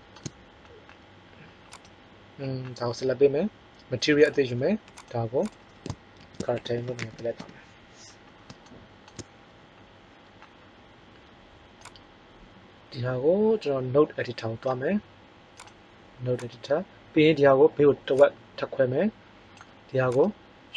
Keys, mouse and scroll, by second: 11.7 click.